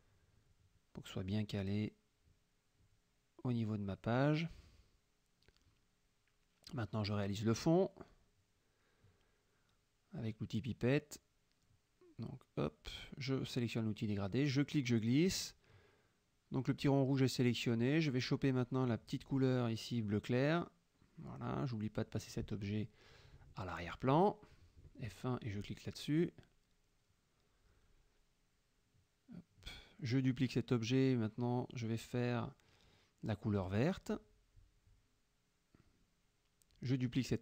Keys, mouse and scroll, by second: 0.4-2.9 ctrl+drag, 3.0 click, 3.5 middle click, 6.9 click, 8.0-9.8 drag, 10.3 F7, 11.3 click, 14.4 click, 15.7-17.6 drag, 21.2 F7, 22.3 click, 24.5 click, 26.0 click, 28.8 ctrl+d, 29.9-31.6 drag, 32.7 F7, 33.7 click, 35.0 F1, 36.9 ctrl+d.